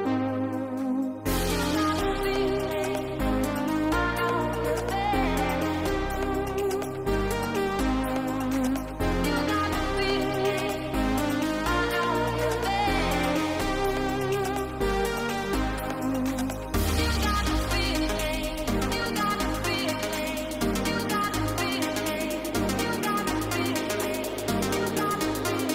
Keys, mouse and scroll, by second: 0.1 middle click, 1.2 click, 1.6 middle click, 2.2 middle click, 3.3 click, 3.7 middle click, 4.1 drag, 4.8 click, 5.8 middle click, 6.2 shift+a, 11.0 middle click, 11.6 middle click, 12.3-12.9 drag, 13.4 click, 14.1 click, 14.4-14.9 drag, 15.1 click, 15.3-15.9 drag, 16.5-19.1 drag, 19.5-20.1 drag, 21.0 middle click, 21.5 middle click, 22.3-24.7 drag.